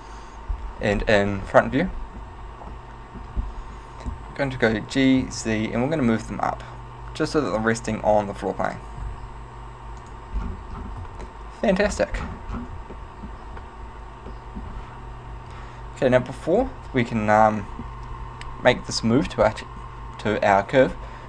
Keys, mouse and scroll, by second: 1.0-1.6 scroll up 3, 1.6 shift+middle click, 2.7 scroll up 2, 2.8 shift+middle click, 3.7-4.1 scroll up 1, 4.9 g, 8.1 click, 9.1 g, 10.2 click, 10.5 scroll down 2, 11.1 scroll down 2, 11.1 z, 11.3 middle click, 12.0-13.0 scroll down 6, 13.0 shift+middle click, 14.4 middle click, 16.5 right click.